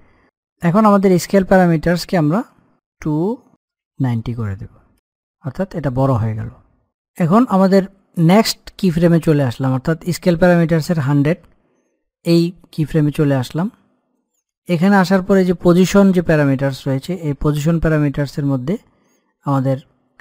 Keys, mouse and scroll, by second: 0.3 click, 2.1 click, 2.3 click, 4.9 scroll down 1, 5.1-6.9 scroll up 1, 6.9 click, 8.1 click.